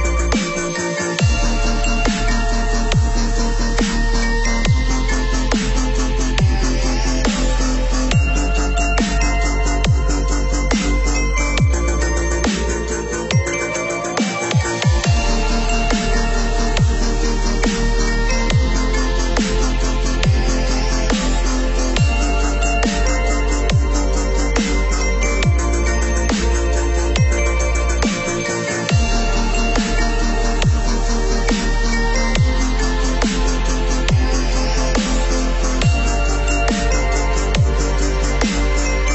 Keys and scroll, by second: 1.5 Left, 28.2 Left, 38.0 Up.